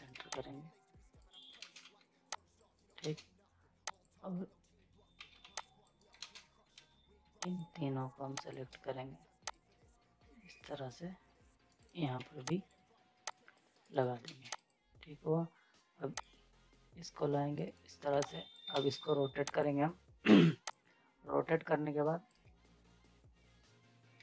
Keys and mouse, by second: 0.1 z, 0.3 click, 1.2 right click, 1.8 z, 2.3 click, 2.7 right click, 3.0 ctrl+space, 3.9 click, 5.2 ctrl+z, 5.6 click, 5.9 right click, 6.2 space, 7.4-11.7 shift+drag, 11.7 ctrl+right click, 12.2 z, 12.4 click, 13.7 right click, 14.3 ctrl+space, 14.6-17.5 drag, 17.5 right click, 18.1 z, 18.2 click, 18.7 ctrl+space, 19.5-24.2 drag.